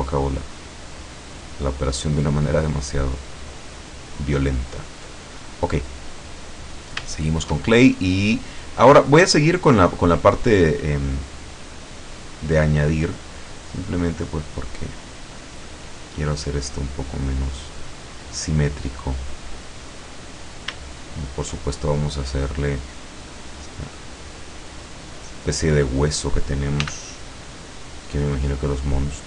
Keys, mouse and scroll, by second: 0.1 ctrl+click, 1.3-3.5 ctrl+drag, 4.2 ctrl+click, 5.3-5.6 ctrl+scroll down 1, 5.7 middle click, 6.5-7.1 scroll up 1, 7.1 shift+scroll up 1, 7.3 shift+middle click, 8.1 middle click, 10.8 middle click, 11.4 scroll down 1, 11.9 middle click, 12.4 middle click, 14.2-17.5 drag, 17.7-18.7 drag, 19.0 click, 19.5 scroll up 2, 20.2 middle click, 21.0 shift+middle click, 23.7-26.4 drag, 26.9 f, 27.8 click, 28.3-29.2 drag.